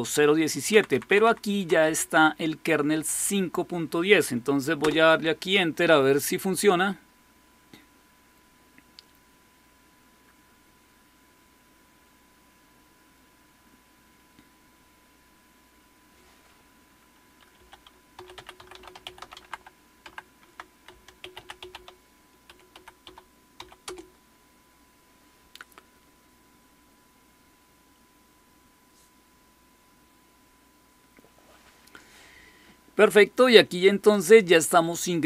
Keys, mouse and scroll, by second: 0.6 Down, 0.8 Down, 0.9 Down, 1.1 Down, 1.3 Down, 1.7 Up, 4.7 Return, 17.4-24.4 typing, 20.3 Tab, 28.9 Tab, 28.9 Return, 28.9 typing.